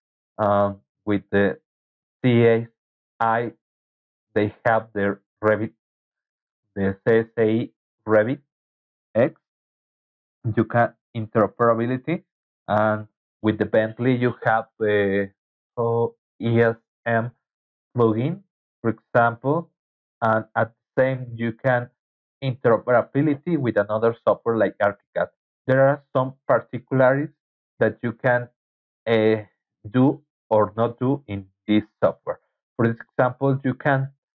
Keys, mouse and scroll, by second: 22.7 Right.